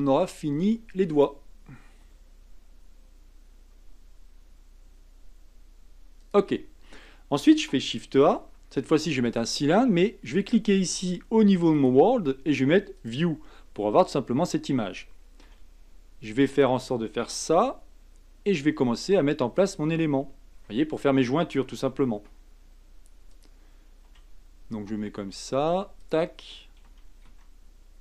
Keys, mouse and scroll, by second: 2.0 g, 8.2 shift+a, 11.7-13.5 drag, 13.5-15.4 scroll down 7, 15.4 s, 17.4 g, 19.9-22.2 scroll up 7, 22.2 s, 24.1 g, 26.8 d, 27.3 s.